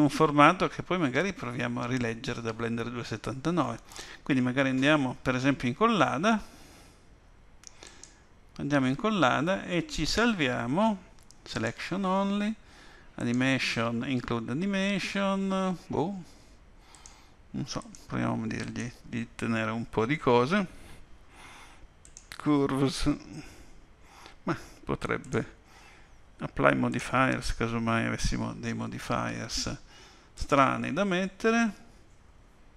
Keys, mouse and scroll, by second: 0.0 click.